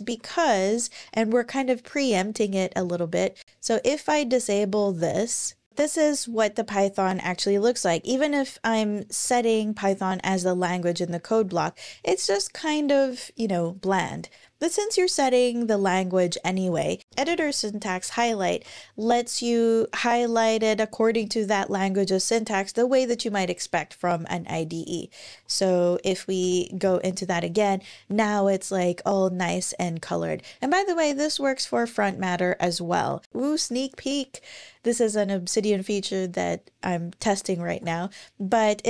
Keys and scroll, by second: 0.0 super+,, 7.2 Page_Down, 7.3 Page_Down, 8.6 super+Right, 9.0 alt+shift+Left, 11.2 Page_Up, 11.4 Page_Up, 16.5 super+,, 17.0-18.9 typing, 25.0 super+w, 25.5 super+o, 26.2 Return, 37.5 alt+super+s.